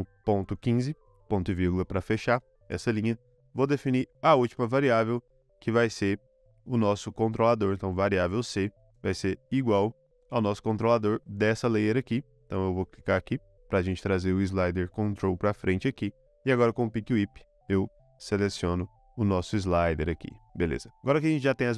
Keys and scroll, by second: 0.0-1.7 typing, 2.2 Return, 3.1-4.2 typing, 7.3 c, 8.7 =, 8.8 space, 20.6 ;.